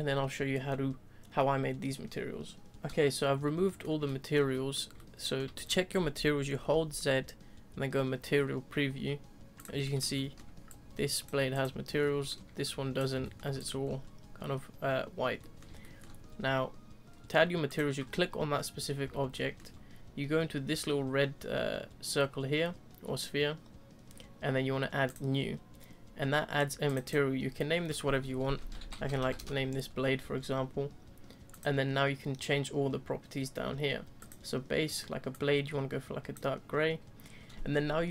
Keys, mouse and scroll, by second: 2.7 click, 3.6-9.0 middle drag, 9.0 z, 9.6 click, 9.8-11.2 shift+middle drag, 11.2 click, 11.6 click, 12.0-13.0 shift+middle drag, 13.0 click, 13.2-13.6 shift+middle drag, 13.6 click, 13.8-14.9 scroll up 3, 15.4-17.7 middle drag, 17.7 click, 19.3-25.1 shift+middle drag, 25.1-26.9 drag, 27.0-32.1 drag, 34.2-35.3 drag, 37.4-38.0 scroll down 1.